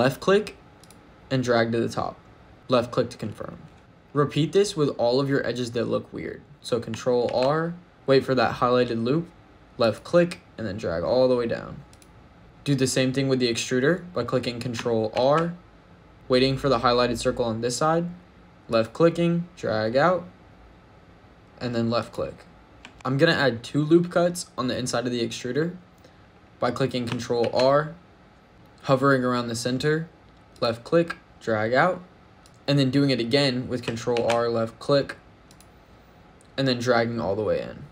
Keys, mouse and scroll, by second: 2.5 click, 3.8 shift+middle click, 3.8-4.9 scroll up 1, 6.5 Tab, 7.1 ctrl+r, 11.7 click, 15.0 ctrl+r, 21.8 click, 22.7 Tab, 22.9 ctrl+z, 27.2 ctrl+r, 32.3 click, 34.0 ctrl+r, 37.8 click.